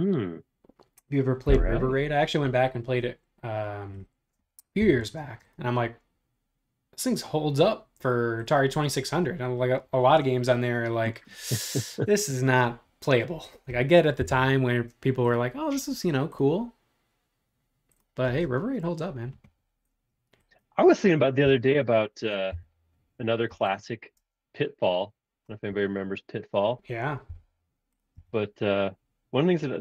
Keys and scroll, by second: 4.8 m, 8.6 space, 14.3 l, 18.2 space, 21.4 m, 22.5 Up, 23.5 6, 24.2 space, 25.7 super+z, 27.3 m, 28.1 Up.